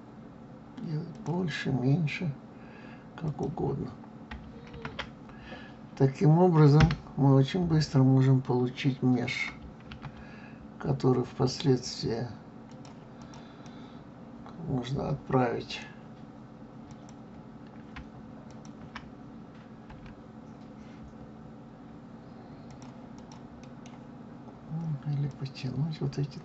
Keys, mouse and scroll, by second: 3.2 click, 4.7 ctrl+a, 9.9 ctrl+a, 13.2 click, 13.6-16.6 middle drag, 16.8 click, 18.5 shift+click, 19.9 s, 23.1 click, 23.6-25.3 middle drag, 25.3 click.